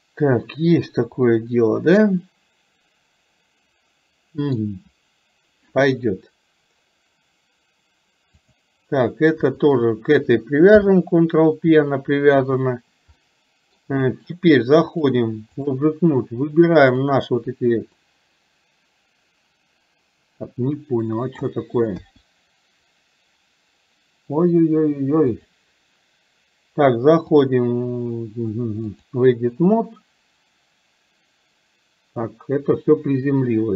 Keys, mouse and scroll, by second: 1.4 scroll up 1, 1.5-3.0 middle drag, 3.0-3.6 scroll down 1, 3.6-3.9 scroll up 1, 3.9 middle click, 8.4 click, 9.8 shift+click, 12.5 click, 13.4 middle click, 15.0 click, 17.0 click, 18.1-21.5 middle drag, 22.0 KP_1, 25.5 click, 27.5-29.1 drag.